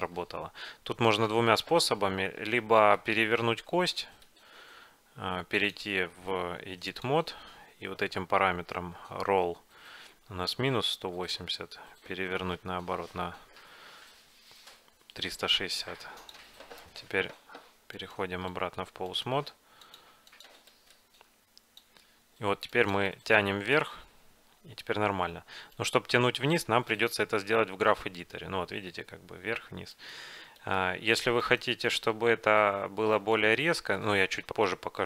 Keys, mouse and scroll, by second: 0.2 middle click, 0.7-2.2 middle drag, 2.2-2.8 scroll up 1, 2.9-5.2 middle drag, 5.4 middle click, 5.7-7.6 drag, 8.2-10.9 middle drag, 11.4-13.2 drag, 17.4 Tab, 18.1-20.3 right drag, 18.6-20.3 drag, 19.9 middle click, 21.6 click, 21.9-23.7 drag, 24.9 g, 26.2 g, 27.4 g, 31.1 g, 32.0 middle click, 32.0 g.